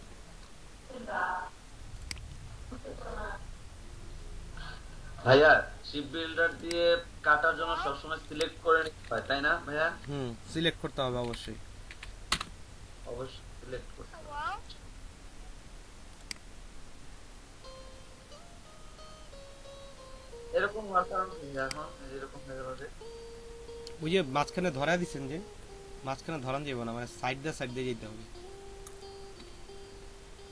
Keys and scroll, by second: 9.0 space, 11.2 s, 11.4 a, 11.9 d, 12.3 Return.